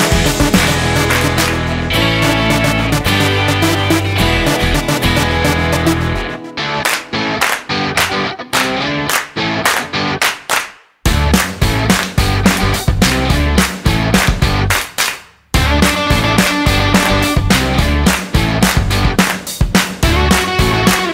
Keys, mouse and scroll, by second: 0.4-0.9 scroll down 4, 1.0-2.6 scroll up 8, 3.6 click, 5.6-6.0 scroll down 5, 7.2 shift+z, 7.8-8.1 scroll up 5, 8.4 scroll down 2, 9.0 shift+middle click, 11.7 click, 12.9 click.